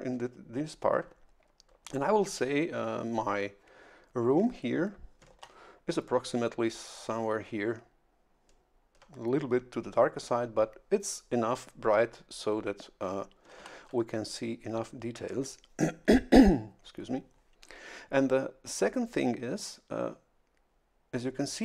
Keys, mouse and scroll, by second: 5.3 shift+F11, 13.5 shift+F11.